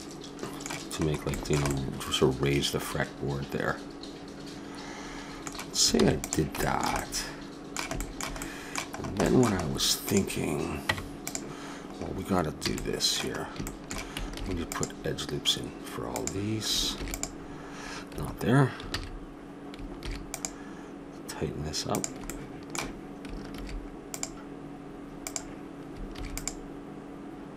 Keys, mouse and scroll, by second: 0.2 middle click, 5.9 ctrl+s, 10.1-11.9 drag, 10.8 Tab, 12.6 a, 14.4 ctrl+r, 16.9 ctrl+r, 18.9 ctrl+z, 19.9 ctrl+r, 22.5-23.9 middle drag, 23.5 ctrl+r, 24.4 click, 26.1 ctrl+r.